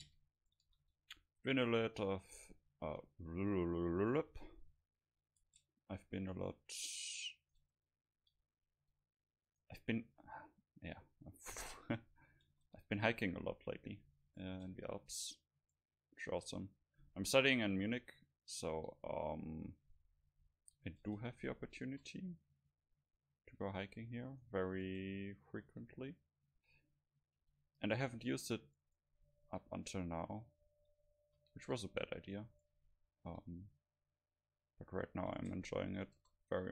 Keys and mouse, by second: 0.7 a, 1.0 c, 2.1 click, 4.4 g, 5.5 Tab, 5.8 click, 6.3 click, 7.5 right click, 7.7 Tab, 8.4 a, 8.8 c, 9.6 click, 10.7 middle click, 11.2 click, 11.6 g, 12.6 Tab, 12.6-14.3 drag, 14.4 right click, 14.6 Tab, 17.0 a, 17.3 a, 17.5 a, 17.9 c, 19.6 g, 21.1 click, 21.1 Tab, 21.9 KP_0, 23.9 right click, 24.9 Tab, 25.6 a, 26.0 v, 26.6 v, 27.5 c, 29.1-31.0 right drag, 29.2-30.7 drag, 29.2 middle click, 31.0 middle click, 31.3 a, 31.7 c, 32.7-34.4 drag, 33.1 middle click, 33.4 g, 35.4-36.7 drag, 35.5 Tab, 36.2 KP_0.